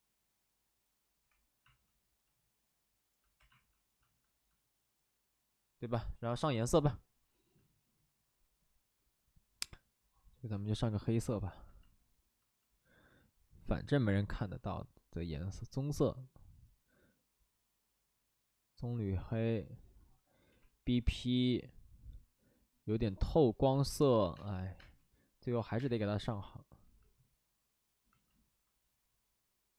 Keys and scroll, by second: 1.2 2, 3.1 3, 3.3 2, 20.4 b, 20.8 p, 24.3 space, 24.7 space, 25.5 ctrl+z, 25.7 space.